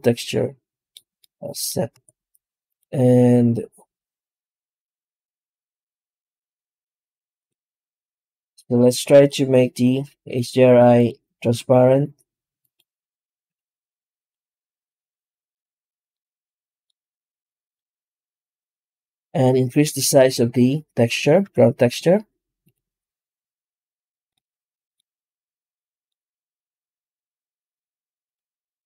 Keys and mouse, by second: 0.6 middle click, 1.0 middle click, 1.8 z, 5.4-6.1 middle drag, 6.7 z, 8.9 click, 10.8 click, 13.3 z, 15.8 middle click, 17.1 middle click, 18.0 z, 21.3 z, 25.8 middle click, 27.7-28.7 drag.